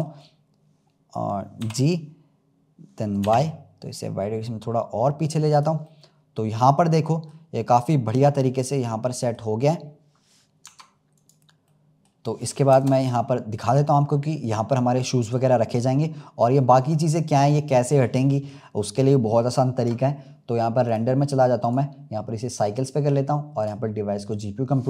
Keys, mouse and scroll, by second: 1.5 g, 5.8-7.6 middle drag, 7.6-8.4 scroll up 4, 8.4-10.6 middle drag, 10.6 Tab, 11.1 click, 11.7-12.6 middle drag, 12.6 KP_0, 13.5 scroll down 2, 14.5-15.5 scroll up 2, 20.8 click, 21.5-24.8 drag.